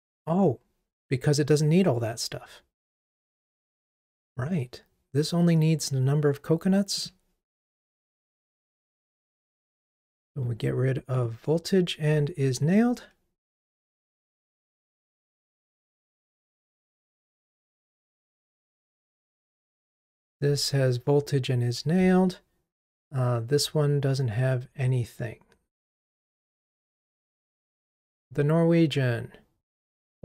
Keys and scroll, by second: 8.9 super+F6, 14.6 ctrl+r.